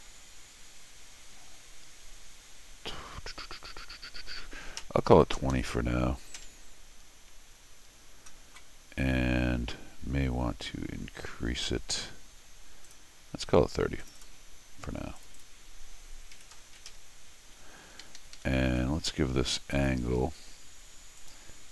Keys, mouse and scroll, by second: 7.9 scroll up 1, 12.8 click, 14.0 click, 14.2 click, 15.2 click, 15.3 click, 18.0 Escape, 18.2 Escape, 18.3 Escape, 18.7 d, 19.7 click, 21.2 click.